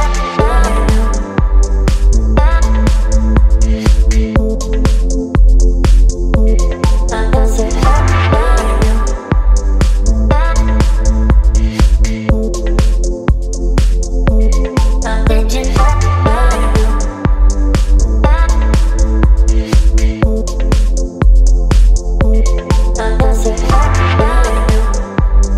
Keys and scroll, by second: 0.9 space, 2.6 Down, 2.7 Down, 2.8 Down, 2.9 Down, 3.1 space, 3.8 ctrl+j, 4.2 ctrl+t, 7.7 Return, 8.1 Down, 9.7 ctrl+j, 10.1 ctrl+t, 13.3 Return, 14.9 Delete, 16.7 Delete, 17.0 space, 19.0 Delete, 20.4 v, 21.1 space, 23.0 space, 25.1 Delete.